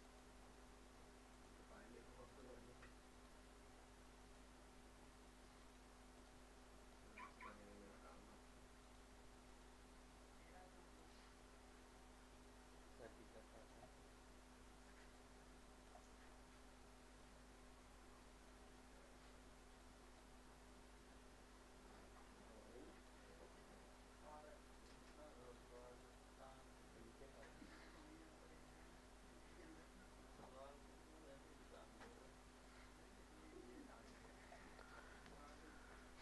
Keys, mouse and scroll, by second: 0.0 click, 2.3 right click, 3.1 click, 5.6 right click, 6.2 click, 8.8 right click, 9.5-15.1 drag, 15.1 click, 16.2 scroll down 1, 17.2-21.2 drag, 21.2-23.9 drag, 23.9-25.4 drag, 25.4 right click, 26.0-31.7 drag, 31.7 right click, 32.1 click, 34.8 middle click.